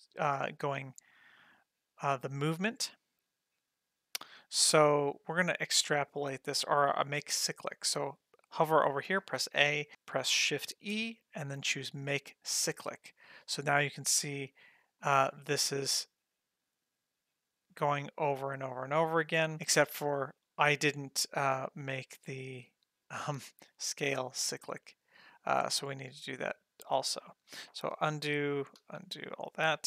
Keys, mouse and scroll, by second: 0.5 click, 1.2-5.7 drag, 6.2-7.5 scroll down 5, 7.0 middle click, 7.5 scroll up 1, 9.2 a, 10.7 shift+e, 15.0-23.3 drag, 24.2 click, 28.0 ctrl+z, 28.4 ctrl+z, 28.8 ctrl+z.